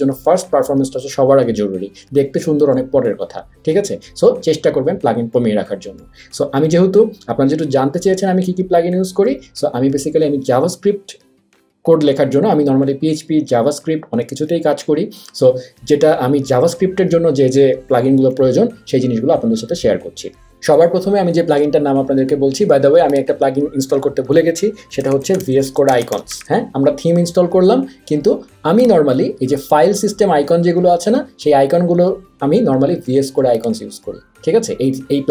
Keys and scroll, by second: 24.8-26.8 typing.